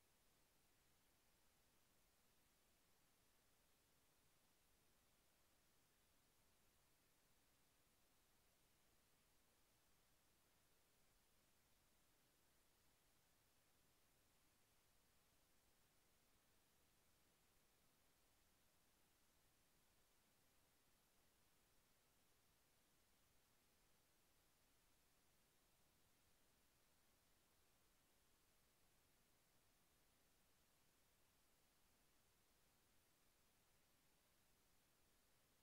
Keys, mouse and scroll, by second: 14.9 click, 16.5 ctrl+a, 17.9 ctrl+c, 19.9 click, 21.7 click, 23.2-24.6 drag, 25.6 click, 27.4 Return, 30.4 ctrl+v, 34.7 Return.